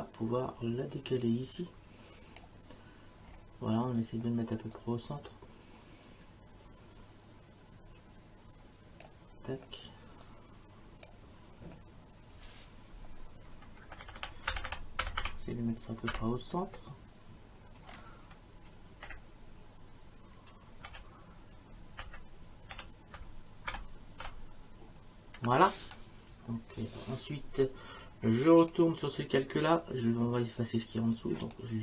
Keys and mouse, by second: 4.7 click, 10.2 click, 13.5 Down, 19.1 Up, 20.9 Down, 22.0 Left, 22.7 Down, 28.6 click, 31.4 click.